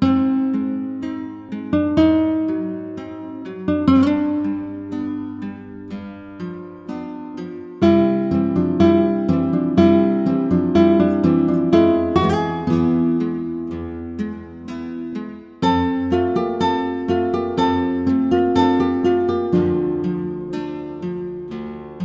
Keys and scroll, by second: 13.6 ctrl+-, 20.6 ctrl+=.